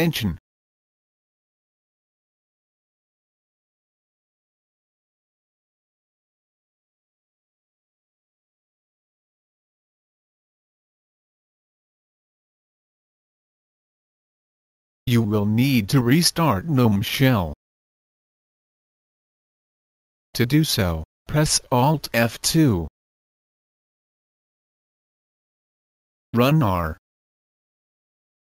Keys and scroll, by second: 0.0-9.0 typing, 22.9 alt+F2, 26.4 typing.